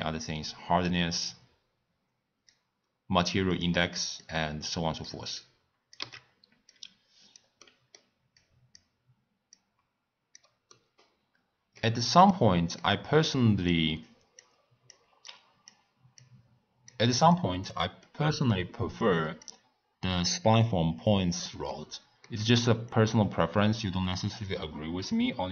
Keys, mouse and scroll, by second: 3.5 click, 4.2 drag, 5.4 click, 6.3 x, 6.7 click, 7.6 middle click, 8.4 click, 9.5 click, 10.7 middle click, 11.2-11.7 scroll down 3, 11.8-13.7 middle drag, 13.7 click, 14.4 click, 15.3 click, 16.2 click, 17.3 click, 18.0 middle click, 19.0 click, 21.7-22.8 middle drag, 22.8 click.